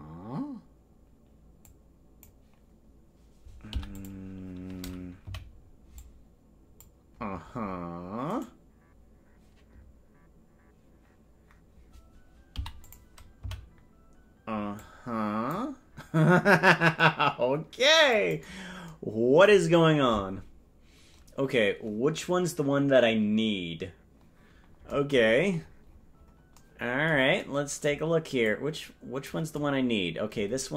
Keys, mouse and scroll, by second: 1.7 click, 3.7 i, 5.4 Right, 6.0 click, 8.4-10.3 right drag, 12.5 i, 13.5 Right, 14.8 click, 25.3-26.1 scroll down 1, 26.1 scroll up 2, 26.2-27.4 scroll down 1, 27.4-28.4 scroll down 3, 28.5-29.6 drag.